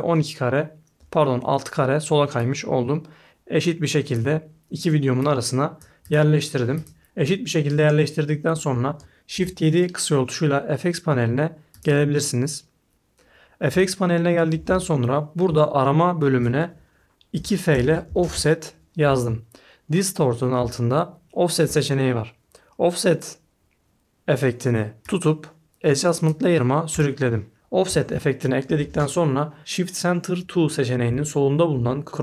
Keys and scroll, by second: 9.3 shift+7, 17.1-18.7 typing.